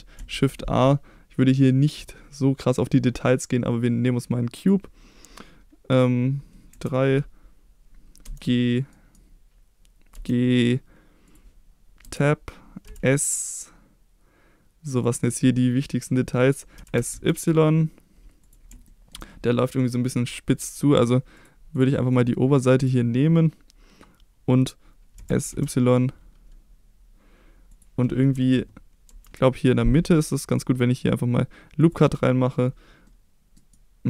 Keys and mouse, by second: 0.3 shift+a, 6.7 KP_3, 8.3 g, 8.9 right click, 10.2 g, 11.3 click, 12.0 Tab, 12.9 s, 15.0 click, 16.8 s, 16.9 s, 16.9 x, 17.1 y, 18.4 click, 18.9 shift+middle click, 21.4 click, 22.1 click, 25.2 s, 25.5 y, 27.7 click, 29.1 ctrl+r, 33.1 middle click, 33.6 right click.